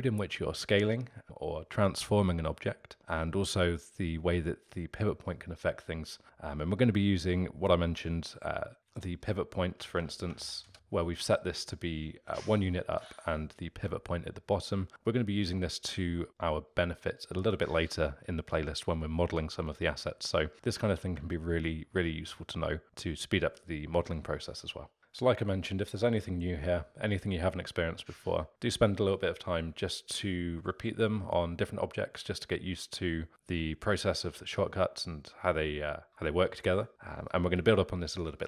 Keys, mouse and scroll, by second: 7.9 Tab, 8.8 g, 13.1 Tab, 20.1-24.8 middle drag.